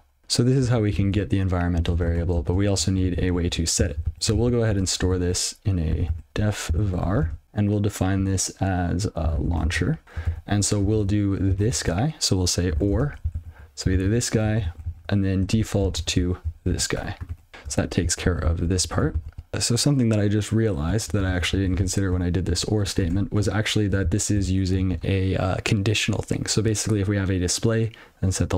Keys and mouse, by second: 0.2 ctrl+n, 1.3 ctrl+a, 2.3 (, 4.2 ctrl+a, 5.3 ctrl+f, 6.0-7.5 typing, 9.1-10.2 typing, 11.4 ctrl+alt+b, 12.2 (, 12.7 r, 12.9 space, 13.3 ctrl+alt+f, 15.4 ctrl+f, 17.4 ctrl+y, 17.5 ctrl+s, 18.8 ctrl+p, 19.3 ctrl+s, 21.9 ctrl+f, 22.9 ctrl+b, 23.5 ctrl+shift+o, 25.0 ctrl+f.